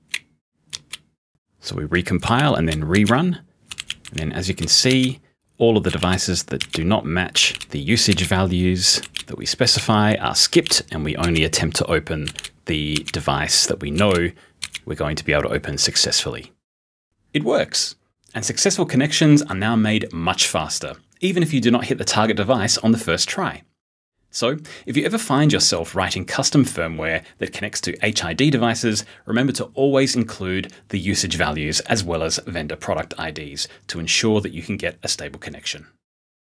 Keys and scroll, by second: 0.9-3.8 typing, 4.9-11.2 typing, 12.3 b, 13.0 r, 14.0 b, 14.6 r.